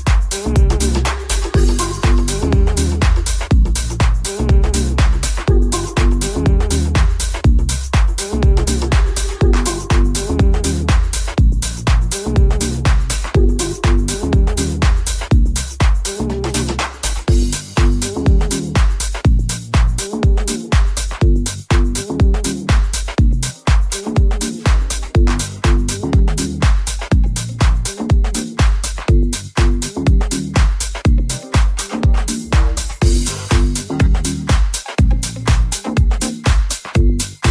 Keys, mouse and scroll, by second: 0.3 right click, 0.7 right click, 1.3-6.1 shift+middle drag, 2.3 Tab, 6.1 right click, 6.2-11.4 middle drag, 8.1 ctrl+b, 11.4 right click, 11.5-19.4 shift+middle drag, 14.0 shift+right click, 17.8 right click, 18.6 shift+right click, 19.4 shift+right click, 19.5-21.5 shift+middle drag, 21.5 right click, 21.5-22.8 middle drag, 22.8 shift+right click, 22.9-24.5 shift+middle drag, 24.5 shift+right click, 24.6-27.8 shift+middle drag, 25.8 g, 27.8-37.5 drag, 34.4 middle click, 34.4 right click, 35.3 shift+middle click, 35.3 shift+right click, 36.2 shift+middle click, 36.2 shift+right click, 37.1 g.